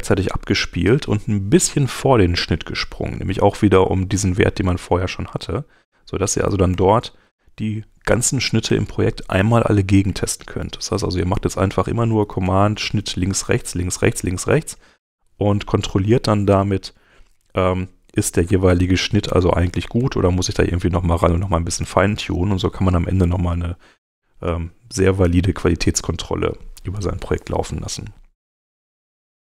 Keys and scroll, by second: 3.4 alt+super+Right, 6.7 alt+super+Right, 8.6 alt+super+Right, 10.1 alt+super+Right, 12.4 alt+super+Right, 17.8 alt+super+Left, 19.3 alt+super+Left, 20.0 alt+super+Right, 21.8 alt+super+Right, 25.8 super+Tab.